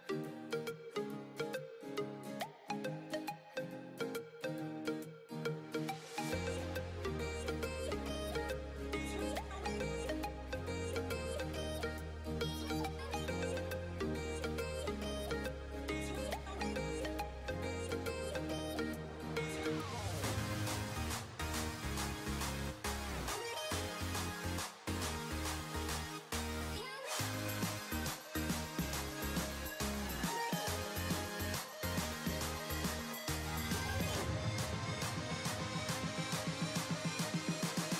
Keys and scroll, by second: 22.5 9, 23.3 d, 24.8 5, 25.5 0, 26.3 6, 27.2 c.